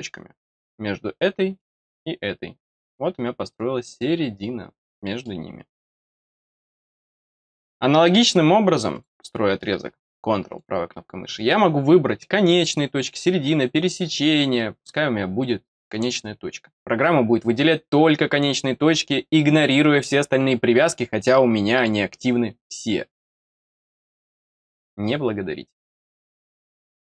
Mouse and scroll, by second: 0.4 click, 1.5 click, 5.0 middle click, 6.1-6.5 scroll down 2, 8.1 click, 8.9 click, 10.4 right click, 15.9 click, 21.7 click.